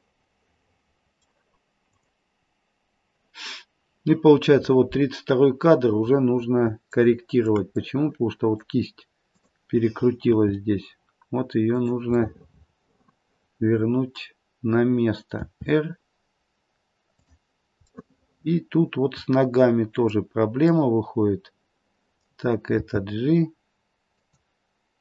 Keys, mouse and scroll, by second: 1.8 click, 7.0 shift+middle click, 7.8 middle click, 9.2 click, 10.2 r, 12.6 middle click, 15.3 r, 18.0 middle click, 19.0 middle click, 20.7 middle click, 22.7 middle click, 22.7 g.